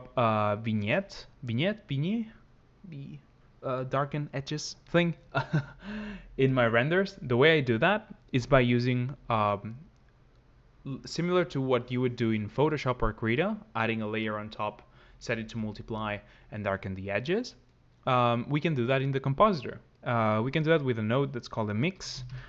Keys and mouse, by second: 0.4 shift+click, 7.3 click, 20.3 click.